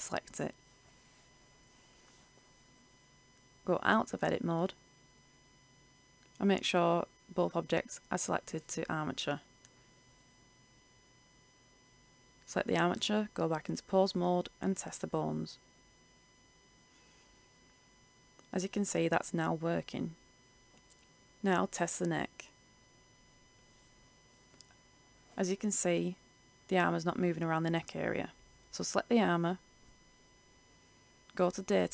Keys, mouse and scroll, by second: 3.6 Tab, 4.6 right click, 6.4-7.5 drag, 7.6 right click, 13.6 click, 15.3 right click, 16.7 r, 19.6 click, 20.1 ctrl+z, 22.9 right click, 24.3 click, 24.6 ctrl+z, 27.8 right click.